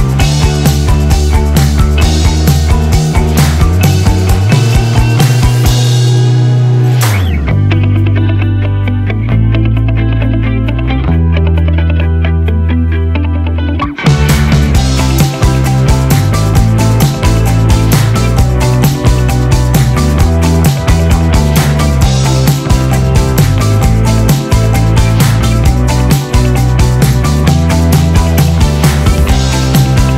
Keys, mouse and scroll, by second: 1.9-2.6 typing, 3.6 click, 8.1 s, 9.4 click, 10.6-12.0 typing, 13.1-18.0 drag, 18.7-19.7 typing, 21.3 click, 22.7 F9, 23.5-30.1 drag, 23.5 typing.